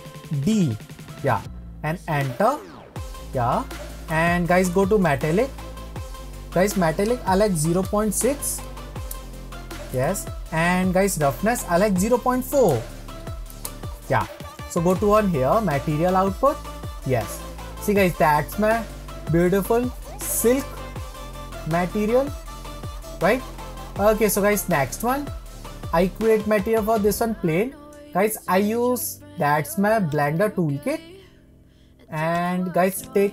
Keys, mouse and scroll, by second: 5.2-8.2 drag, 11.7-14.8 drag, 16.3 click, 17.5-18.3 scroll down 2, 18.4-20.1 scroll up 3, 20.1-24.9 shift+middle drag, 24.9 scroll up 1, 25.3-26.7 middle drag, 26.7-27.3 scroll down 2, 30.3 click, 32.6-33.3 drag.